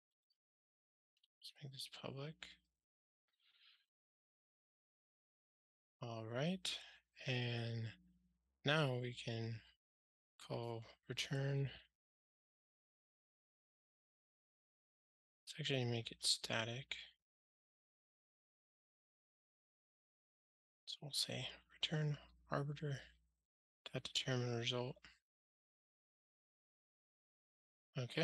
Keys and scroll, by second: 18.3 Return, 26.2 ctrl+alt+shift+r.